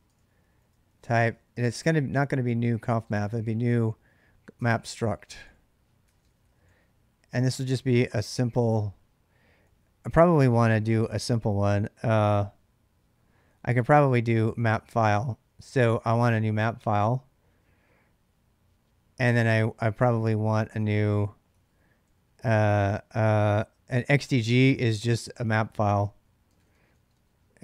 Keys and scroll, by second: 0.0-11.8 typing, 13.1-16.4 typing, 19.5-27.6 typing, 24.2 ctrl+[.